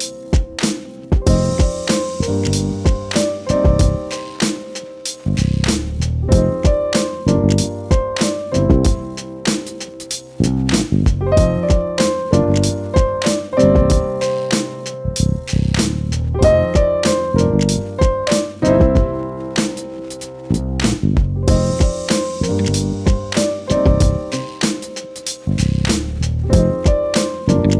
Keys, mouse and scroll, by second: 17.6-22.7 typing, 25.5 click, 26.8 click.